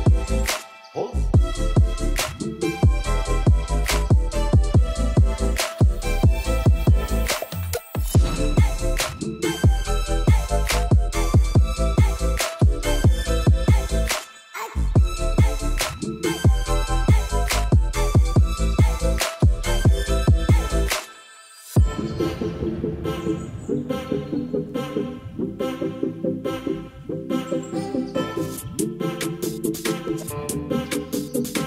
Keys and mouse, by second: 1.4 ctrl+s, 4.6-5.7 drag, 8.0 ctrl+s, 8.3 click, 8.6 shift+middle drag, 8.9 Tab, 9.9 click, 10.7 3, 10.8 click, 11.7 shift+click, 12.4 click, 13.3 click, 15.2 click, 16.2 click, 16.7 click, 17.2 Tab, 18.2-24.8 drag, 25.0-28.2 drag, 28.7-29.7 drag, 30.9 shift+middle click, 31.4 ctrl+s.